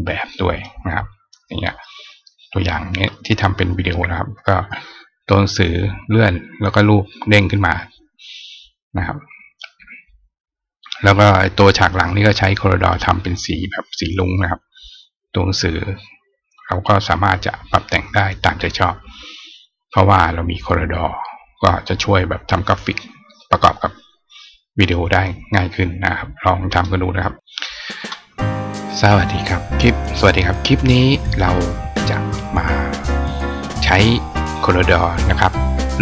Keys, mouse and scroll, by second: 0.3 click, 1.0 click, 2.5 click.